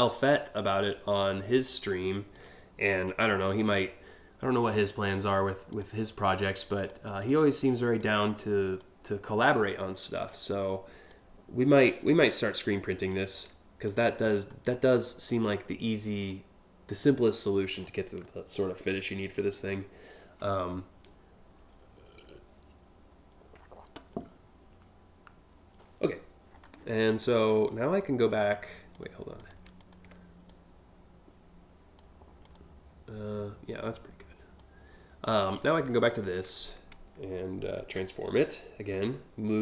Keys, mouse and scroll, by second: 1.2 click, 1.9 click, 2.8-4.2 drag, 4.7 click, 5.3 click, 6.1 click, 6.4 click, 6.8 click, 7.6 click, 9.3 click, 10.7-11.8 drag, 12.0 click, 12.6 click, 13.5 click, 13.9-14.5 scroll up 2, 15.8 click, 17.3 scroll down 2, 26.1 scroll down 2, 26.4 scroll up 1, 27.8 ctrl+click, 28.6 click, 29.0 click, 29.4 ctrl+click, 30.1-31.6 drag, 32.0 click, 33.4 click, 35.1 click, 35.7 ctrl+click, 37.4 ctrl+t, 39.1-39.6 drag.